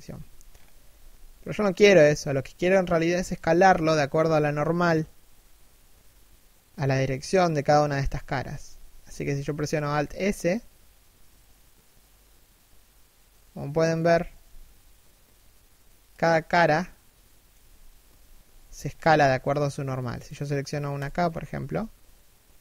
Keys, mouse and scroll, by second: 0.0-0.5 scroll up 1, 0.5 s, 6.5 middle click, 7.5 KP_3, 8.2 KP_1, 9.6 alt+s, 13.5 z, 13.8 alt+s, 16.0 scroll down 1, 16.3 middle click, 17.6 KP_3, 18.0 KP_1, 18.5 scroll up 1, 18.8 alt+s, 20.6 right click, 21.0 alt+s.